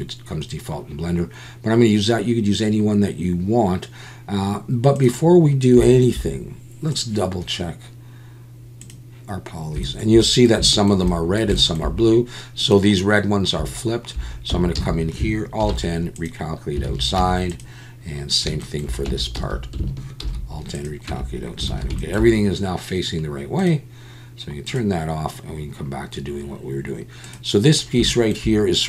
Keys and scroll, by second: 14.5 Tab, 14.8 a, 15.6 alt+n, 16.9 alt+a, 17.2 Tab, 19.1 Tab, 19.4 a, 20.2 alt+n, 21.1 Tab, 21.7 alt+a.